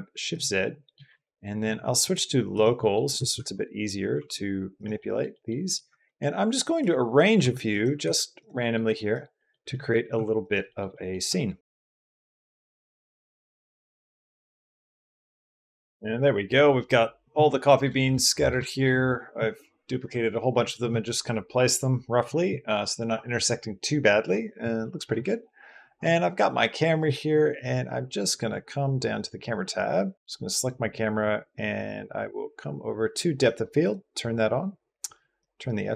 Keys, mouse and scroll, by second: 0.3-0.7 drag, 0.9 r, 1.4 Escape, 1.9-2.6 drag, 2.9 r, 3.1 x, 3.9 y, 4.8 click, 5.1 click, 5.5-8.6 typing, 7.5 middle click, 8.4 click, 9.2 click, 9.9 r, 10.5 click, 10.7 click, 11.1 click, 11.6-15.8 typing, 11.7 click, 12.0 shift+click, 12.2 click, 12.4 click, 12.5 shift+click, 12.7 click, 12.8 click, 12.8 click, 13.0 click, 13.1 shift+click, 13.2 middle click, 13.3 middle click, 13.3 click, 13.4 middle click, 13.4 shift+click, 13.8 click, 13.8 right click, 14.0 click, 14.2 click, 14.4 click, 14.5 click, 14.5 click, 14.6 click, 14.7 click, 14.8 ctrl+shift+click, 14.9 click, 15.0 click, 15.1 shift+click, 15.2 click, 15.5 shift+click, 15.6 Escape, 18.0 middle click, 30.1 shift+b, 33.3 drag, 33.8 click, 35.2-35.9 drag.